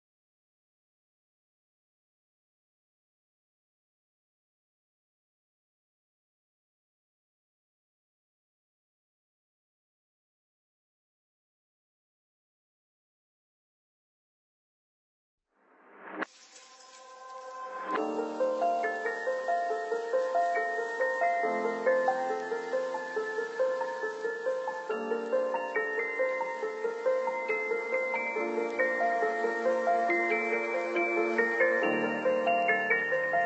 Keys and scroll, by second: 7.3 Delete.